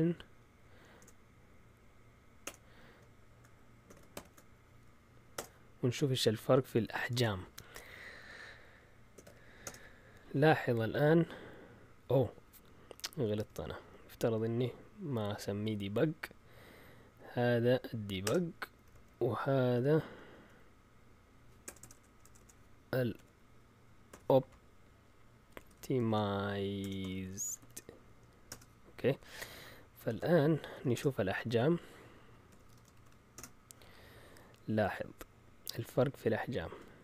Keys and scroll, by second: 0.0-1.0 typing, 2.4 typing, 3.9-7.4 typing, 8.9-9.7 typing, 13.7 Up, 16.0 Up, 18.2 Return, 18.7 Up, 18.9 Up, 19.5 Down, 20.0 Up, 20.3 Up, 21.6-24.1 typing, 25.3-28.1 typing, 28.5 Return, 30.1 ctrl+l, 30.5-31.2 typing, 32.3-33.5 typing.